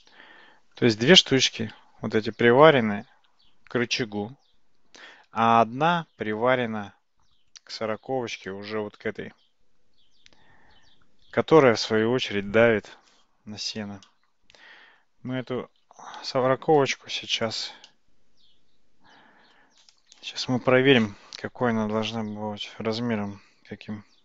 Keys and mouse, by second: 0.0-0.8 middle drag, 7.8-8.4 shift+middle drag, 8.5-11.1 middle drag, 14.1-15.1 middle drag, 16.0 alt+z, 16.8 click, 17.4 click, 17.9-19.6 middle drag.